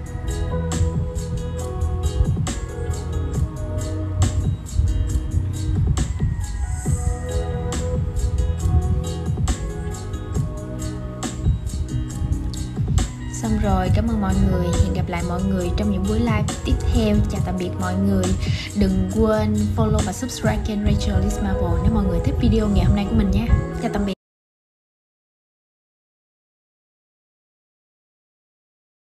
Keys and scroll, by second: 0.9 super+z.